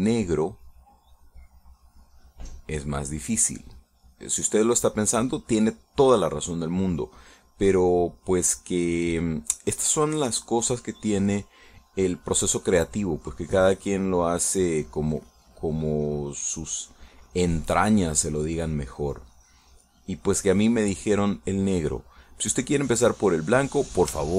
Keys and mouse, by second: 4.5-11.9 drag, 11.9 middle click, 14.2-20.8 drag, 20.9 middle click, 21.7 click, 22.6-23.6 drag, 23.9-24.3 drag.